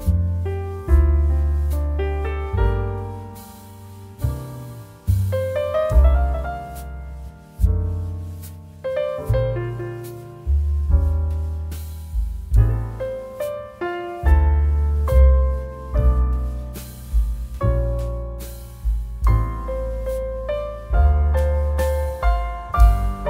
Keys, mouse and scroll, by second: 4.9-5.8 scroll, 8.9 click, 11.0 alt+click, 12.3 ctrl+b, 14.3 click, 17.2 Tab, 19.6 alt+z.